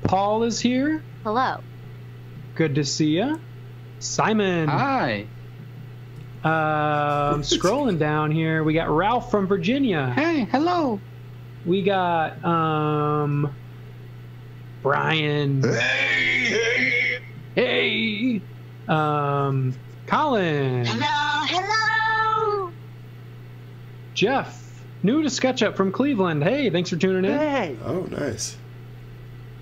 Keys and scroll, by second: 1.1 a, 6.0 space, 6.3 a, 11.5 space, 13.2 a.